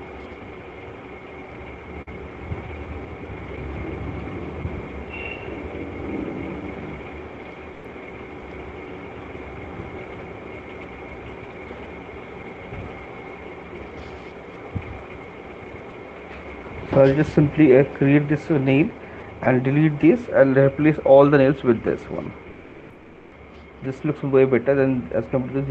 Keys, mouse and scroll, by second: 2.6 click, 3.0 click, 3.2 click, 3.6 click, 3.8 click, 4.0 alt+click, 4.2 click, 4.8 click, 5.0 click, 5.2 click, 5.9 click, 6.0 click, 6.5 click, 6.7 click, 7.1 click, 7.5 click, 8.0 click, 8.7 click, 9.3 click, 9.7 click, 10.6-11.1 shift+click, 14.0 shift+right click, 15.5 right click, 16.5 right click.